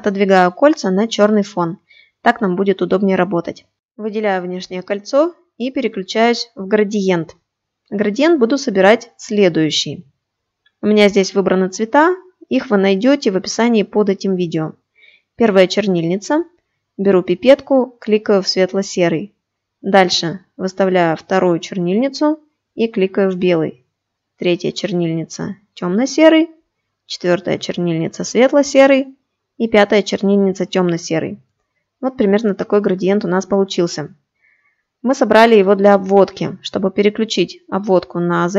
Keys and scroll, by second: 36.3 shift+x.